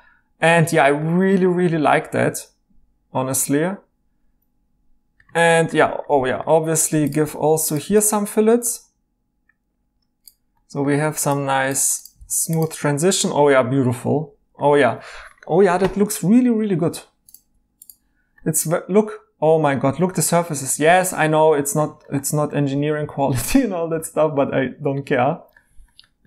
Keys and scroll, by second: 5.3 e, 12.2 e.